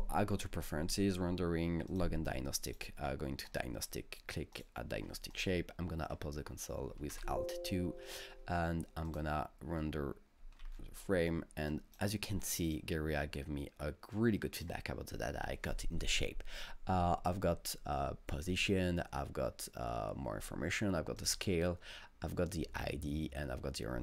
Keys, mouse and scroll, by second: 1.9 click, 2.7 click, 3.5 click, 4.6 click, 5.3 click, 7.1 alt+2, 9.1 click, 10.6 alt+Tab, 11.7 click, 12.7 click, 14.2-17.1 drag, 21.2 click, 21.4-24.0 drag.